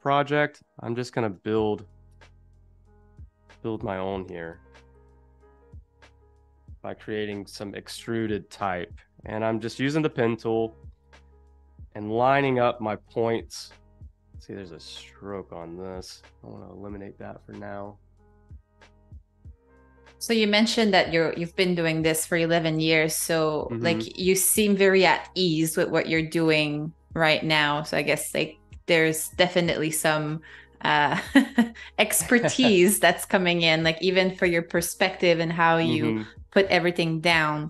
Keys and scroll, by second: 4.2 i, 5.3 shift+super+[, 5.8 a, 6.3 space, 9.5 z, 10.0 space, 11.1 z, 11.8 a, 14.9 super+-, 21.1 i, 21.8 a, 23.3-25.5 typing, 28.8 super+-, 29.9 space, 30.8 z, 31.7 a.